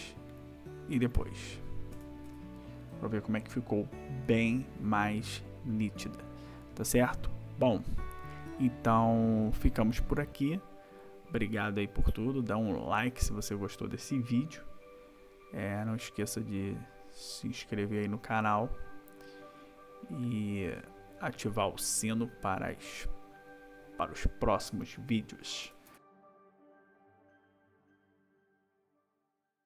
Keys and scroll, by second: 2.0 ctrl+-, 25.7 ctrl+=.